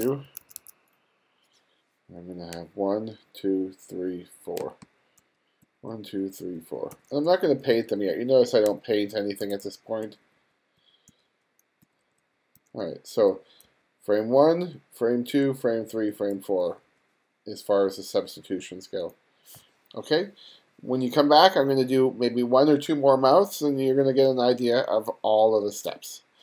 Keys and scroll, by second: 0.3 2, 2.6 ], 3.5 ], 4.1 ], 4.6 [, 5.7 ], 6.9-10.1 typing, 11.1-13.7 typing, 14.8 ], 15.5 ], 16.4 [.